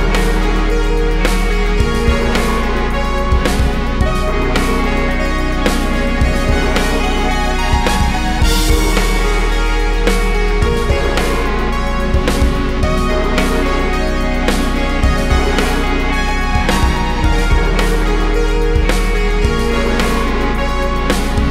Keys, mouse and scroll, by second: 5.0 drag, 8.1 click, 8.3 ctrl+shift+click, 12.2 click, 13.5-15.9 drag, 16.8 alt+a, 18.1 click.